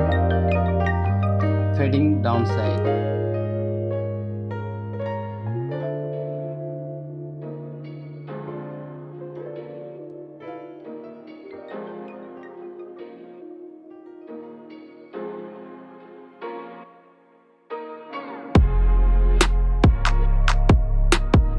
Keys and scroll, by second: 0.2 ], 1.4-4.7 typing, 5.6 ctrl+b, 10.9 Return, 11.3 F2, 11.8 Return, 12.5 Delete, 13.6 space, 16.3 ctrl+i, 16.5-18.4 typing, 20.3 v, 21.2 ctrl+z.